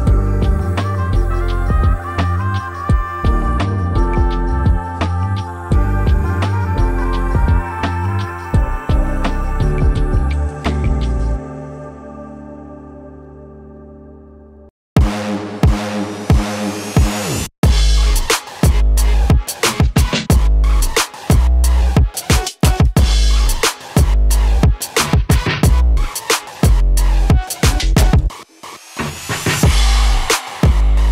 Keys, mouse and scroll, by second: 11.7-13.8 typing, 11.9 Tab, 12.5 Tab, 17.0-30.0 drag, 30.7 click.